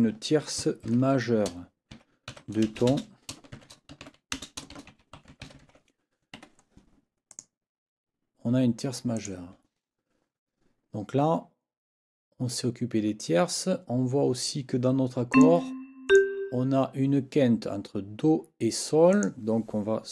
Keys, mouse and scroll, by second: 0.9 ctrl+t, 2.3-6.2 typing, 6.4 Escape, 7.3 click, 9.1 click, 15.3 ctrl+click, 16.1 ctrl+click, 19.1 click.